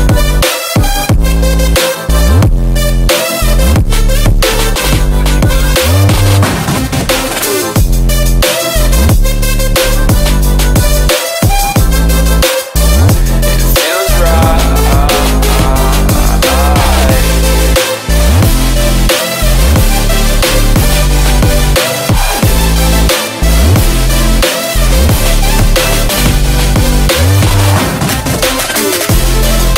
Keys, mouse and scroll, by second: 2.1 v, 3.2 click, 4.6 click, 8.3-12.7 drag, 14.0 ctrl+v, 14.6 click, 15.6 F10, 15.7-17.9 right drag, 18.5-24.7 drag, 24.8 F10, 26.1-28.7 drag, 29.2 ctrl+c, 29.4 ctrl+v, 29.6 click.